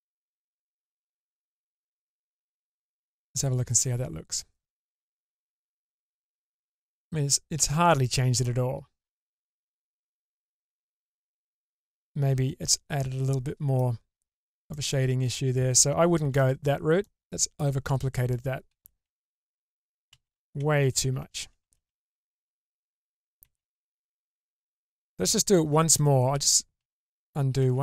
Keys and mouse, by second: 1.8 click, 3.3 Tab, 4.7-6.7 middle drag, 8.0-9.8 middle drag, 10.7-13.7 middle drag, 14.7-15.3 middle drag, 16.1 shift+space, 17.0-17.5 middle drag, 18.5 ctrl+z, 18.7 ctrl+z, 19.1 ctrl+z, 19.4 ctrl+z, 19.7 ctrl+z, 19.9 ctrl+z, 20.2 ctrl+z, 20.4 ctrl+z, 20.6 ctrl+z, 21.2 ctrl+z, 21.5 ctrl+z, 22.0 ctrl+z, 22.5 ctrl+z, 22.9 ctrl+z, 23.0 ctrl+z, 23.1 ctrl+z, 23.9 ctrl+z, 24.0 ctrl+z, 24.4 ctrl+z, 24.7 ctrl+z, 25.5-25.9 shift+middle drag, 26.3 ctrl+z, 26.8 ctrl+z, 27.2 ctrl+z, 27.6 ctrl+z.